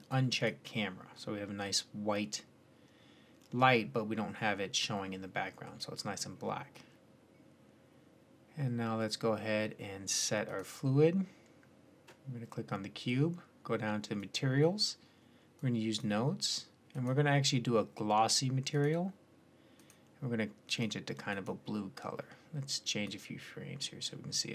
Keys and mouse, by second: 0.7-5.8 drag, 5.8-8.4 middle drag, 10.3-18.4 drag, 18.6-19.6 middle drag.